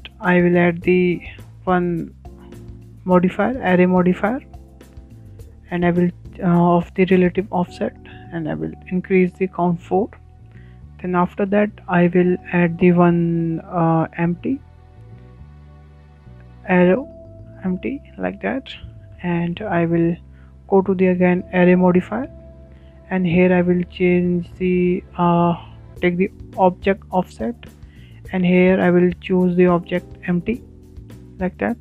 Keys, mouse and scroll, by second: 0.4 Tab, 0.6 Tab, 1.2-2.8 shift+middle drag, 2.8 click, 3.6-6.6 drag, 9.5 click, 10.5-12.2 drag, 12.2 shift+middle click, 12.6-13.0 scroll down 1, 13.0-13.5 scroll up 1, 13.8 shift+a, 13.8 shift+a, 18.7-19.0 scroll down 4, 19.0 middle click, 19.7 shift+scroll down 4, 20.0-21.0 shift+middle drag, 21.0 scroll up 3, 21.3 shift+middle click, 21.8 click, 22.6 click, 23.1-26.1 shift+middle drag, 29.0 click, 31.3-31.8 drag.